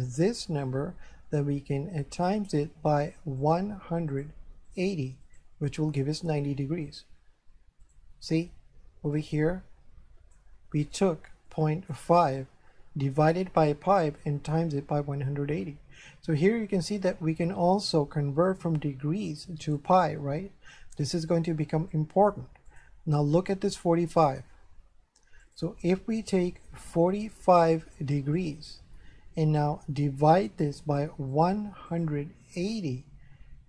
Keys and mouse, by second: 2.2 click, 3.4 click, 7.8 click, 9.4 click, 11.5 KP_Decimal, 11.9 KP_5, 22.7 click, 25.5 click, 26.8 click, 28.4 click, 30.2 click, 31.3 click.